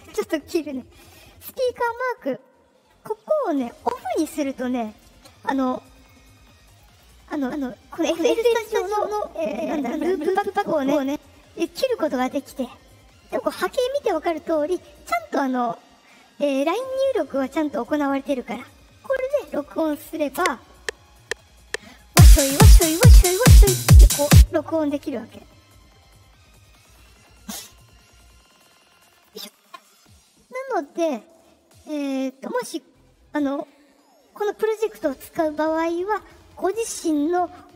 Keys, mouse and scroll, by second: 0.0 click, 1.8 click, 3.8 click, 4.8 click, 5.9 click, 6.6 click, 9.9 click, 10.8 click, 20.3 space, 24.2 space, 29.1 click, 30.6 click, 32.1 click, 36.5 click.